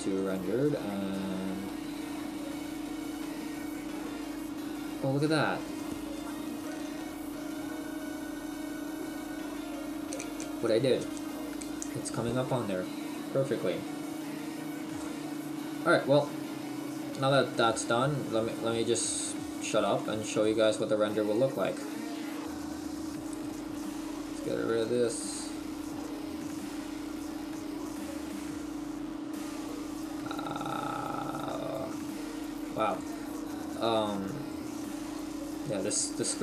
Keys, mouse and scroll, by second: 1.6-2.6 scroll up 1, 2.6 shift+middle click, 2.6-2.9 scroll up 1, 3.9-4.6 scroll up 4, 13.1-14.3 scroll down 3, 16.5 scroll down 6, 17.5-18.0 scroll down 10, 18.0 shift+middle click, 18.0-18.7 shift+scroll down 1, 23.9 ctrl+s, 28.1 right click, 30.4 right click, 32.9 right click, 32.9 click, 35.3 right click.